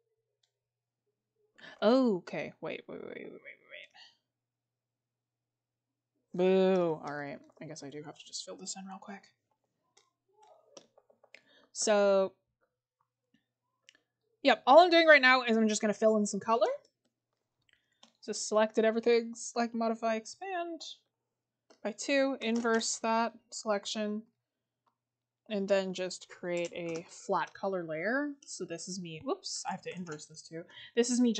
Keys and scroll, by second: 6.9 scroll, 7.5-8.7 scroll up 1, 9.6 scroll down 1, 16.2 scroll down 1.